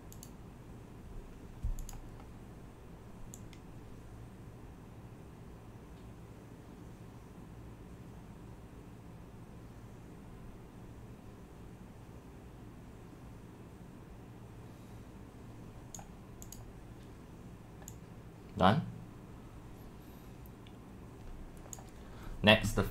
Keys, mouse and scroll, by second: 3.4 click, 3.7-6.4 scroll up 7, 6.4 click, 13.9-14.6 scroll down 1, 14.6-15.9 scroll down 1, 16.0-17.5 drag, 16.5 scroll down 1, 17.9-18.5 drag, 18.6 drag, 19.2 click, 19.4 drag, 19.8 drag, 21.7 click.